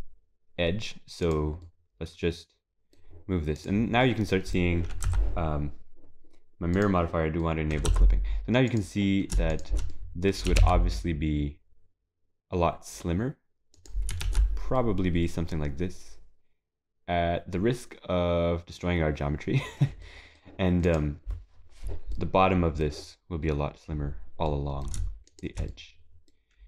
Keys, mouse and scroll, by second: 1.7 middle click, 3.6 click, 4.0 middle click, 5.1 Tab, 6.8 click, 7.4 middle click, 7.9 Tab, 8.7 click, 9.5 shift+click, 9.9 middle click, 10.5 g, 14.3 ctrl+s, 14.8 middle click, 15.9 ctrl+s, 20.0 middle click, 20.9 click, 22.2 middle click, 24.5 middle click, 25.3 shift+click, 25.7 middle click.